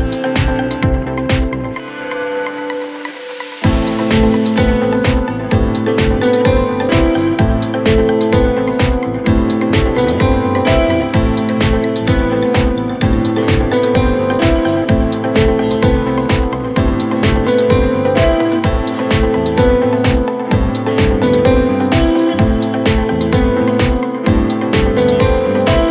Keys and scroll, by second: 13.6 g.